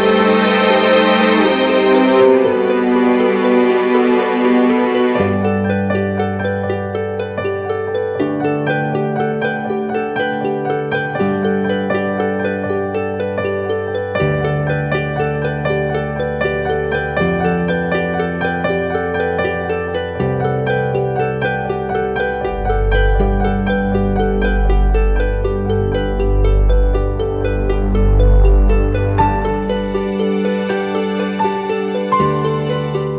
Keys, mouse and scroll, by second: 6.7-7.4 typing, 10.1 double click, 13.9 double click, 17.9-18.7 scroll down 1, 23.1 [, 23.2 [, 23.4 [, 23.6 [, 26.0 ctrl+t, 26.9 ctrl+click, 28.5 Return, 30.0 double click.